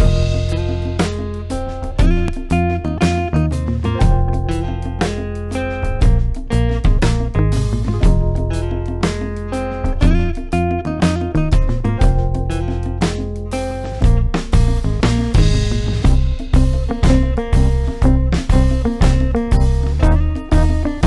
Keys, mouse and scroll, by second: 0.0-1.0 space, 7.0-11.2 drag, 17.3-19.5 drag.